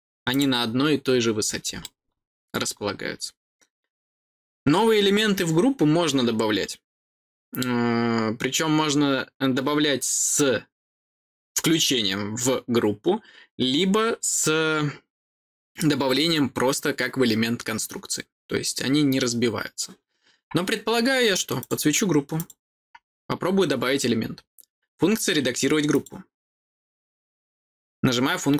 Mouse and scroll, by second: 0.3 click, 1.2 scroll down 4, 1.8 middle click, 3.0-21.5 middle drag, 21.5 click, 22.3 click, 25.9 click.